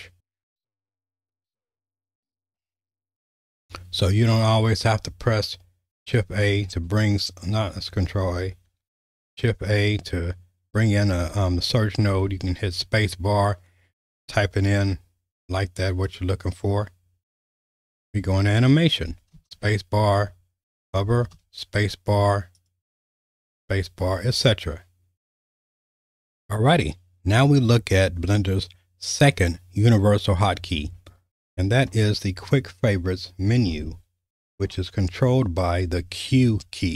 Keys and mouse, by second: 6.2 ctrl+a, 9.4 shift+a, 12.0 space, 19.3 space, 21.3 space, 24.0 space, 26.1 alt+/, 36.2 q.